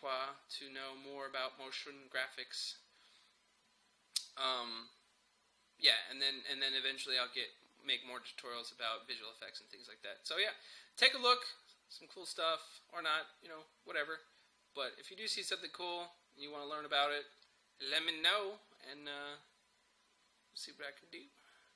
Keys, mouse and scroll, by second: 3.2-4.3 scroll down 1, 7.3-8.2 scroll down 1, 9.4-10.6 scroll down 1, 11.3 scroll up 1.